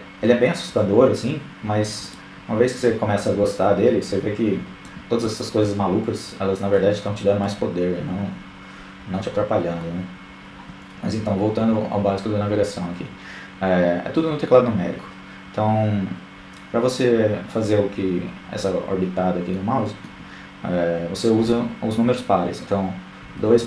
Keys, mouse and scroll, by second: 2.2-3.5 drag, 4.7-6.9 middle drag, 8.1-17.1 middle drag, 18.0-19.4 middle drag, 21.4-23.6 typing.